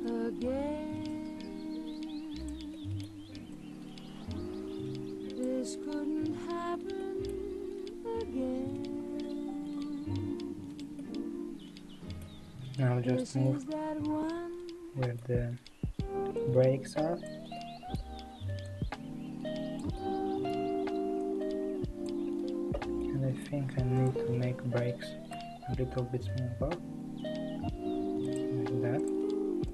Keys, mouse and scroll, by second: 0.1 click, 2.1 3, 2.5 click, 2.7-3.6 middle drag, 3.6 click, 7.0-8.9 middle drag, 8.9 l, 9.7 s, 11.0-12.8 middle drag, 12.8 click, 13.4-16.5 middle drag, 16.5 click, 17.5-18.8 middle drag, 18.8-19.9 drag, 19.9-21.3 middle drag, 21.3 click, 23.1 middle click, 24.1 click, 26.4 s, 29.1 click.